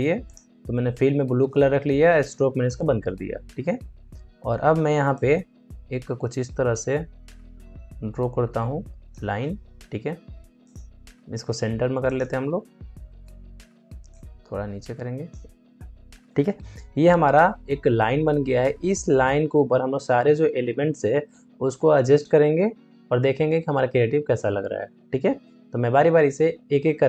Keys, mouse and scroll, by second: 5.1-10.5 drag, 11.1 ctrl+a, 12.0 click, 12.8 ctrl+d, 14.0-17.7 drag.